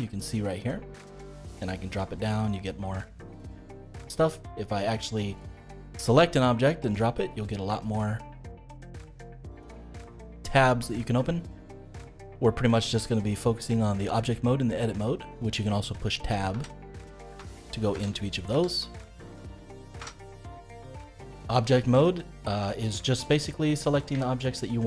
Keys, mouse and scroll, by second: 1.3-4.3 drag, 4.8 click, 6.9-10.0 drag, 16.5 Tab, 17.3 Tab, 17.9 Tab, 18.5 Tab, 19.2 Tab, 19.9 Tab, 20.6-21.9 middle drag, 21.9 click, 23.3-24.8 middle drag.